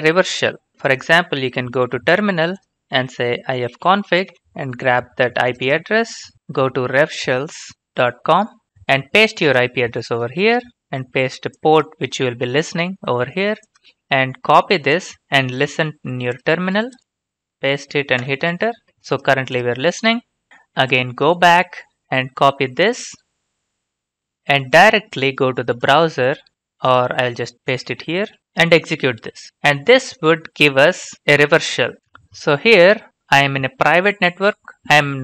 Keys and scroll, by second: 0.7 alt+Tab, 3.5-4.5 typing, 6.3 ctrl+shift+c, 10.2 ctrl+v, 18.2 Return, 24.3 ctrl+c, 28.3 ctrl+v.